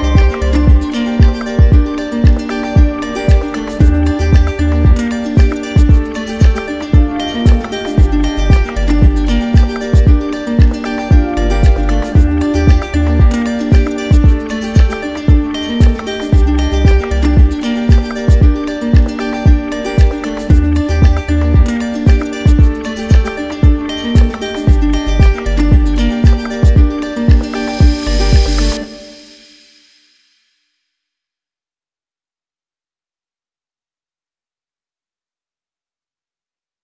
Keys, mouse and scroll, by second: 5.3 click, 8.2 click, 9.8-10.9 drag, 18.0-19.1 drag, 22.6-23.7 drag, 24.0 ctrl+d, 24.8 ctrl+d, 28.4 ctrl+d, 29.9 click, 31.7 click, 33.1 click, 35.2 click.